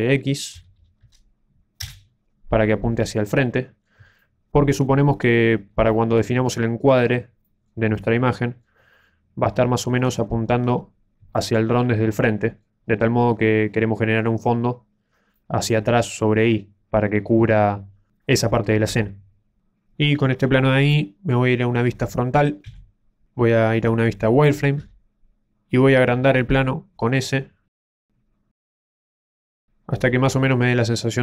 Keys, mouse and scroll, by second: 2.9 middle click, 4.1 shift+middle click, 5.2-5.9 scroll up 2, 5.9 shift+middle click, 6.4 middle click, 7.4 shift+middle click, 7.9 middle click, 9.9 shift+click, 10.6-10.9 scroll up 4, 11.3 shift+middle click, 11.7 middle click, 15.0-15.4 scroll down 4, 15.3 middle click, 22.6 KP_1, 24.7 z, 29.0 click, 30.4 shift+middle click.